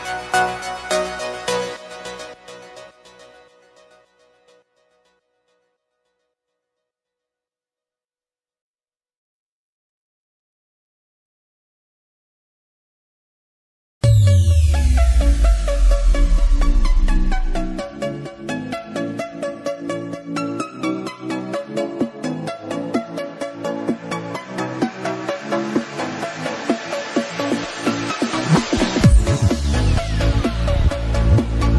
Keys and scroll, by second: 1.6 Delete.